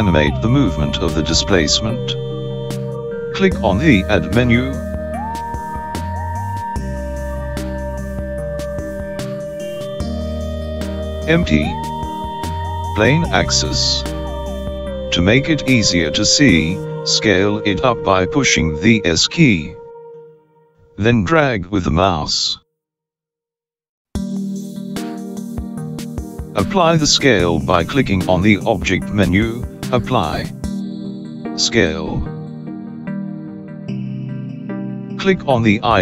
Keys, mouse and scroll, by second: 7.9 click, 22.8 s, 28.5 click.